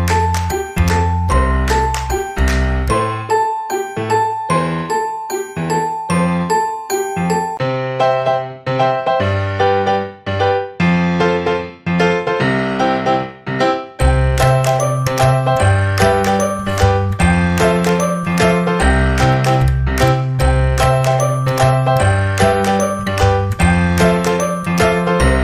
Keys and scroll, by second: 1.3 ctrl+s, 5.2-7.5 typing, 11.0 shift+w, 11.5 shift+Left, 11.8 shift+e, 12.9-14.7 typing, 18.6 ctrl+s.